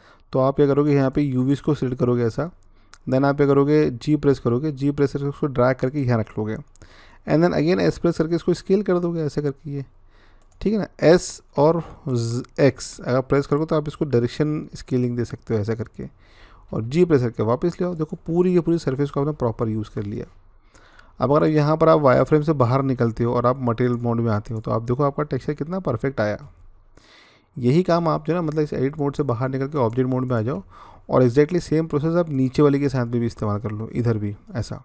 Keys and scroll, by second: 4.1 g, 7.5 s, 11.4 s, 16.4 x, 16.5 g, 22.8-23.8 z.